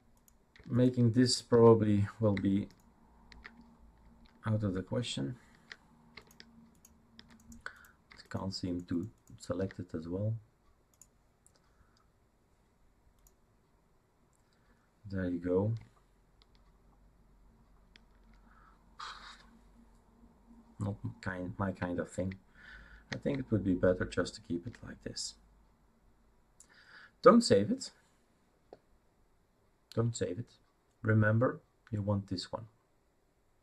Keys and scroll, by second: 22.2 ctrl+z.